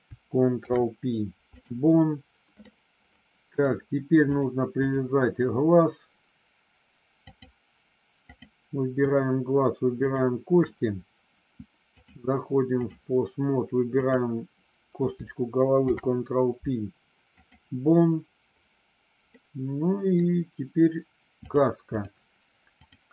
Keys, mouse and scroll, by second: 0.6 ctrl+p, 2.6-3.6 middle drag, 4.3 click, 7.3 click, 8.2 click, 9.9 shift+click, 11.8-12.8 drag, 13.9 click, 15.7 ctrl+p, 19.3 middle click, 21.3 click, 22.7 click.